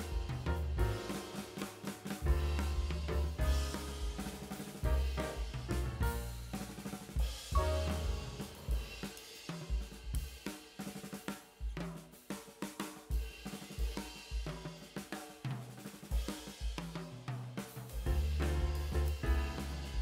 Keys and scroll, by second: 16.3 space.